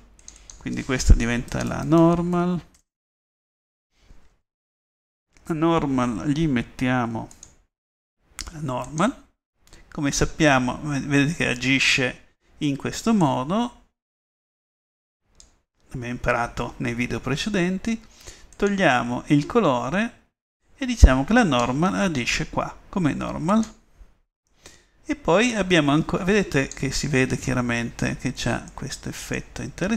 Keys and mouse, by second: 9.3 click, 15.1 middle click, 16.2-17.8 middle drag, 22.6-23.7 middle drag.